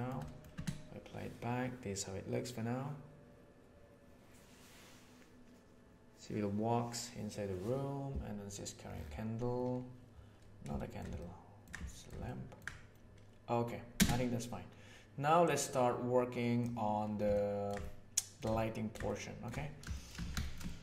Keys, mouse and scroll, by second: 0.1 middle click, 0.5 space, 10.7 shift+middle click, 11.1-11.7 ctrl+middle drag, 11.9 shift+middle click, 12.3 ctrl+middle click, 13.9 space, 15.4-16.6 drag, 17.3 ctrl+middle click, 17.9 shift+middle click, 18.6 ctrl+middle click, 19.1 shift+middle click, 19.9 shift+middle click, 20.2 alt+shift+a, 20.4-20.8 ctrl+middle drag.